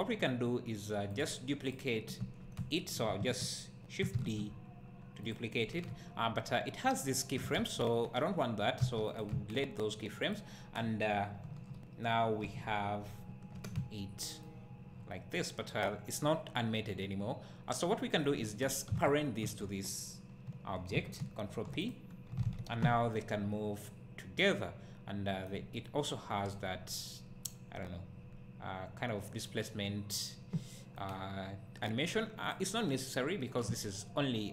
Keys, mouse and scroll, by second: 1.1-2.0 scroll down 1, 2.0 scroll down 1, 2.2 `, 4.6 shift+d, 5.3 click, 7.6 a, 10.3 click, 10.8 scroll down 1, 11.5 KP_1, 13.2 `, 14.5-19.0 right drag, 19.0 shift+click, 21.9 ctrl+p, 22.4 alt+a, 23.2-32.5 right drag, 32.5 click.